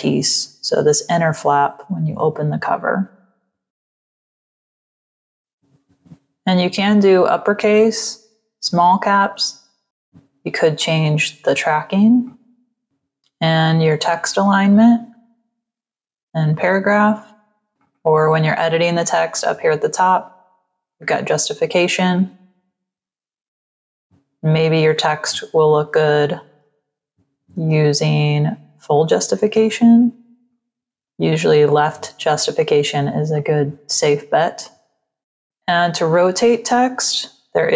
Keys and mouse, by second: 3.8 click, 4.2 click, 4.6 click, 5.0 t, 8.7 click, 10.7 click, 12.1 click, 15.8 click, 17.5 click, 20.1 click, 20.8 click, 22.9 click, 23.9 click, 26.4 click, 27.4 ctrl+a, 30.4 click, 33.2 click, 34.5 click, 35.2 click, 36.5 r.